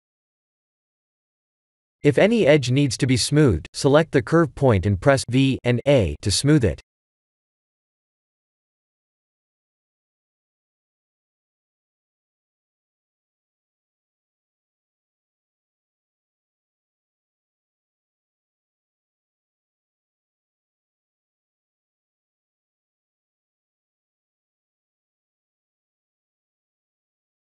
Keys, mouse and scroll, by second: 0.4 scroll up 2, 1.4 Tab, 2.2 click, 3.0 v, 4.8 click, 5.2 v, 5.6 Tab, 6.2 shift+z, 6.9 scroll down 2, 7.3 middle click, 8.3 Tab, 9.1 Tab, 10.2 Tab, 11.3 middle click, 12.3 click, 12.7 v, 14.5 middle click, 14.8 middle click, 16.1 click, 16.5 v, 18.4 click, 18.8 v, 19.7 click, 20.2 middle click, 21.6 KP_1, 22.1 shift+z, 22.9 shift+middle click, 24.1 Tab, 25.6 shift+z, 26.8 middle click.